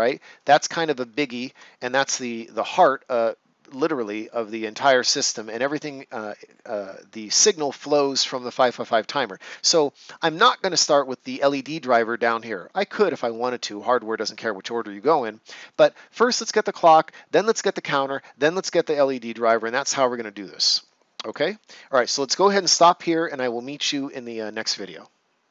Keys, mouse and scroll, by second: 1.0 right click, 1.1 ctrl+scroll up 1, 11.4 right click, 15.0 right click, 20.8 click, 21.6 right click.